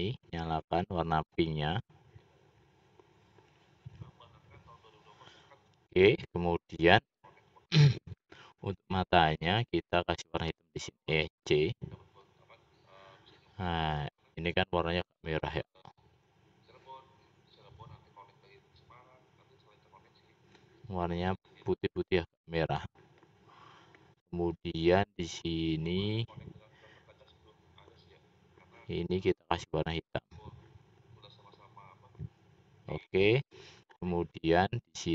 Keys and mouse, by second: 1.1 click, 1.7-2.7 drag, 3.1 middle click, 4.1 middle click, 5.5 middle click, 6.2 middle click, 9.2-12.9 drag, 11.4 c, 16.1 click, 16.2 typing, 17.7-19.2 middle drag, 21.8 typing, 31.1-32.4 drag, 32.4-33.6 typing, 35.0 middle click.